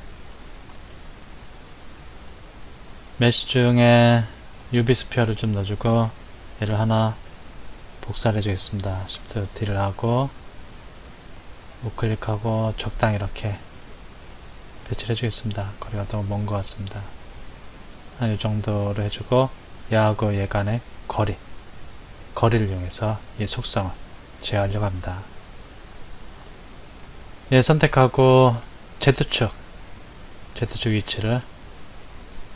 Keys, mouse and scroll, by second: 0.7 shift+a, 9.4 shift+d, 11.7 click, 13.9-16.0 middle drag, 16.0 click, 18.1-19.8 shift+middle drag, 19.8 click, 20.4 click, 21.2 click, 23.2 click, 25.2-29.5 middle drag, 29.8-32.5 drag.